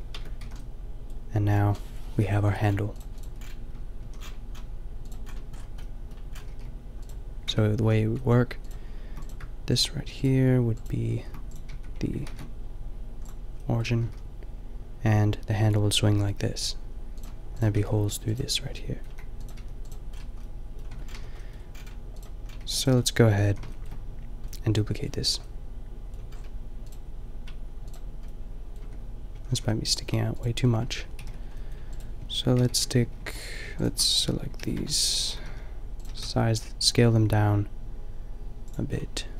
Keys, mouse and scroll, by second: 0.2 Tab, 0.4 a, 2.5 KP_5, 3.9 click, 4.2 a, 5.2-6.1 drag, 6.1-7.0 middle drag, 6.4 r, 7.5 Tab, 7.8 a, 8.1-9.4 middle drag, 11.2 shift+s, 11.7 Tab, 12.2 ctrl+alt+shift+c, 13.9 r, 17.8 Tab, 18.8 click, 19.1 a, 19.6 g, 20.9 Tab, 21.1 a, 22.1 click, 22.5 a, 23.5 a, 26.9-29.9 drag, 28.8 Tab, 29.4 a, 29.5 a, 29.9 a, 31.1 ctrl+l, 31.1-32.6 drag, 32.6 ctrl+;, 33.2 ctrl+l, 34.6 ctrl+l, 35.3 s, 36.1 s, 39.2 click.